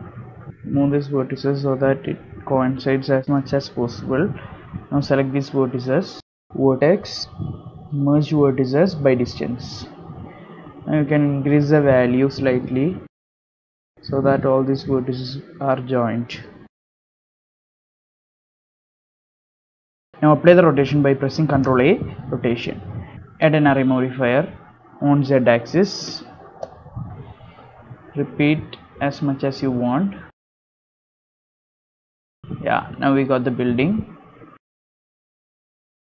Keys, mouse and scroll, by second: 0.1-0.6 scroll up 7, 0.4 shift+middle click, 0.5 shift+middle click, 0.6 z, 1.1 click, 2.0 g, 4.1 ctrl+l, 4.1 g, 4.1 a, 4.5 shift+middle click, 4.8 shift+middle click, 4.8 scroll down 5, 5.1 alt+shift+click, 7.2 click, 11.3 click, 13.7 shift+click, 16.2 middle click, 16.8 click, 17.4 g, 18.1 click, 18.3 g, 19.1 scroll down 7, 19.3 Tab, 19.5 middle click, 19.9 z, 20.1 click, 20.9 ctrl+a, 23.3 click, 27.8 click, 28.5-30.3 click, 30.0 click, 30.2 click, 30.5 click, 30.6 click, 31.1-31.5 scroll down 7, 31.5 shift+middle click, 32.5 click, 33.4 scroll down 2, 33.6 middle click, 34.0 scroll up 5, 34.8 middle click, 35.2 scroll up 2, 35.5 shift+middle click, 35.9 middle click.